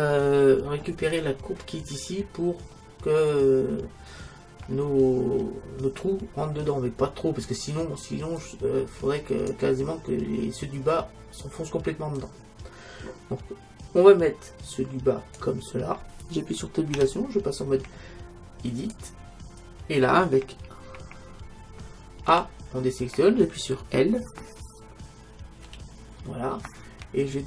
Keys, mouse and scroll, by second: 8.4-10.3 drag, 12.3-14.0 drag, 17.0 Tab, 22.3 a, 25.7 l.